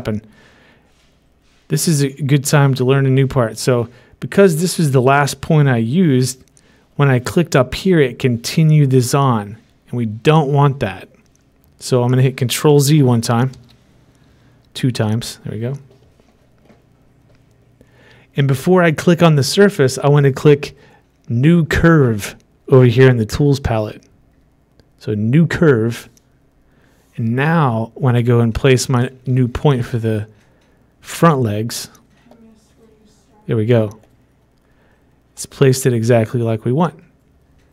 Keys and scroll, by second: 14.1 ctrl+z, 15.0 ctrl+z.